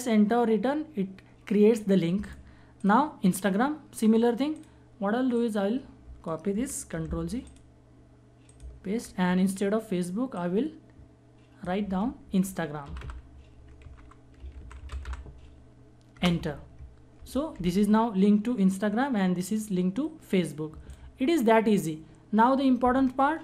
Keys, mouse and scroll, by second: 1.7-6.2 drag, 6.5 ctrl+c, 7.0 click, 8.4 ctrl+v, 9.9 click, 12.3-15.1 typing, 15.7 Return, 20.4 click.